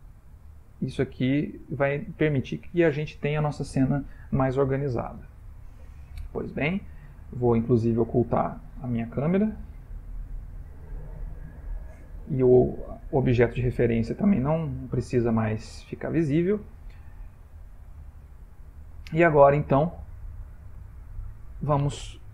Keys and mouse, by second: 1.5 click, 6.2 middle click, 8.0 click, 10.5 h, 11.1 middle click, 12.2 click, 14.7 h, 15.5 middle click, 18.1 click, 19.3 ctrl+middle click, 21.0 shift+middle click.